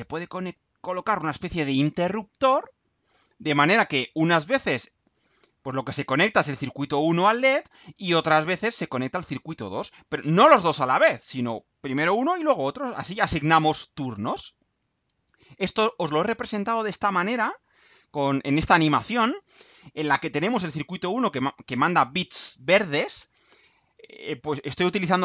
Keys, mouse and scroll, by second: 14.8-15.2 scroll down 2, 15.8-16.2 scroll down 2.